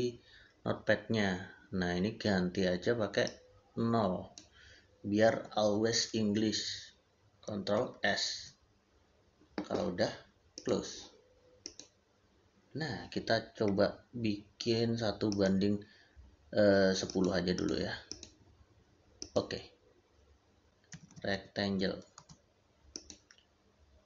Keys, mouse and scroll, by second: 3.1 click, 5.2 0, 7.6 ctrl+s, 10.4 click, 15.1 click, 19.1 click, 20.6 Escape, 20.8 r, 22.0 c, 22.0 space, 22.8 click.